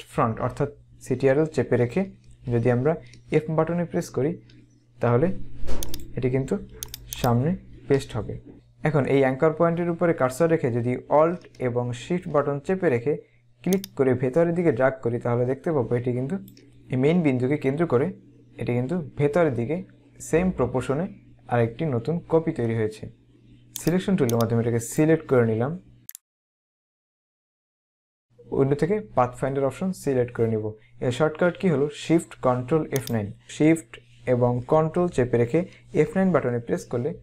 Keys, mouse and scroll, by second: 6.1 click, 7.7 ctrl+f, 23.9 click, 33.2 click, 36.0 ctrl+shift+F9.